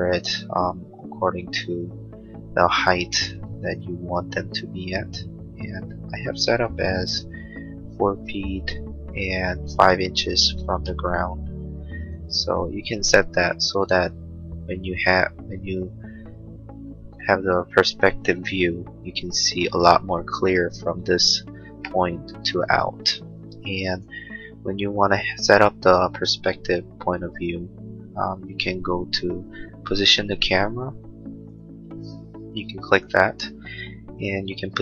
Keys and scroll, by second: 3.5 l, 10.7 space, 12.3 l.